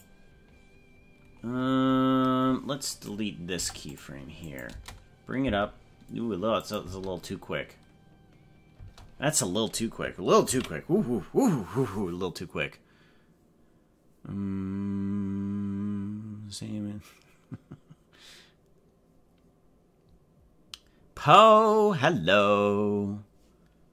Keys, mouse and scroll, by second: 1.6-2.3 scroll up 10, 2.9 right click, 3.6 Delete, 4.4 click, 4.7 space, 5.5 space, 6.6 click, 6.8 space, 8.9 space, 11.0 ctrl+s.